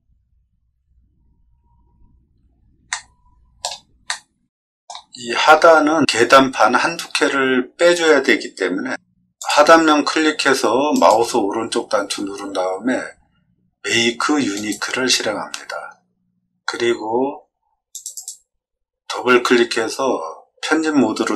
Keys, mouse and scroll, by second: 2.9 shift+middle click, 4.0 middle click, 5.1 scroll up 2, 5.6 middle click, 9.3 click, 10.9 right click, 14.5 click, 17.9 click, 18.1 click.